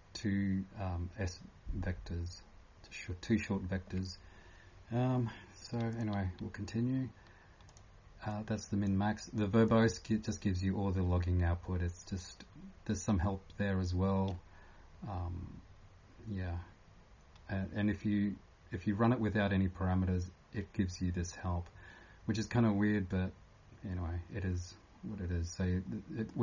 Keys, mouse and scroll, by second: 5.9 click, 7.7 click, 8.3 click, 9.7-12.6 click, 11.4 scroll down 1, 12.6 typing, 24.5 scroll down 1, 25.0 scroll up 1, 26.2 click.